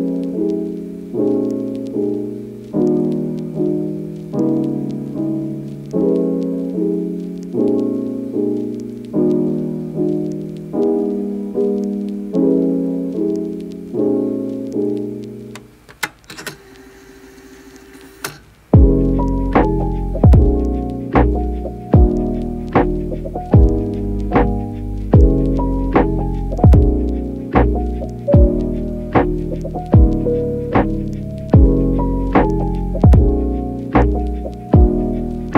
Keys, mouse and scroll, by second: 0.4 click, 0.9 click, 4.3 ctrl+z, 4.7 [, 4.8 [, 5.9 ], 6.6 click, 6.6 ], 7.9 ], 8.9 click, 9.3 click, 9.5 right click, 13.5 ctrl+middle click, 15.1 click, 15.4 click, 16.6 click, 17.1 ], 20.4 click, 21.7 shift+click, 22.7 click, 23.6 click, 24.7 ], 25.3 ctrl+z, 27.7 click, 30.4 middle click, 33.4 click, 34.6 click, 35.3 click.